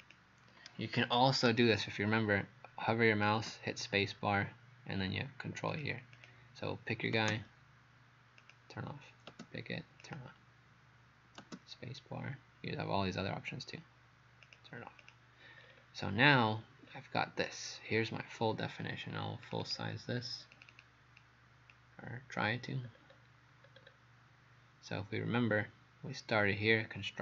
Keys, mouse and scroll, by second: 5.7 click, 6.2 click, 8.4 click, 10.0 click, 14.5 click, 15.0 click, 15.6-16.0 scroll down 3, 16.9-17.8 scroll down 2, 18.0-19.5 scroll down 2, 19.5 click, 19.7 click, 20.5 click, 20.7 click, 21.7 click, 22.9 scroll up 2, 23.7 scroll up 3, 25.5 scroll up 1.